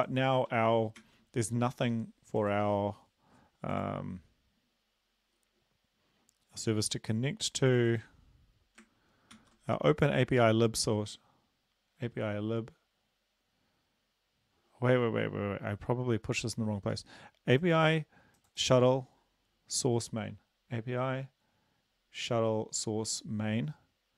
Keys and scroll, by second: 1.0 ctrl+s, 9.3 ctrl+c.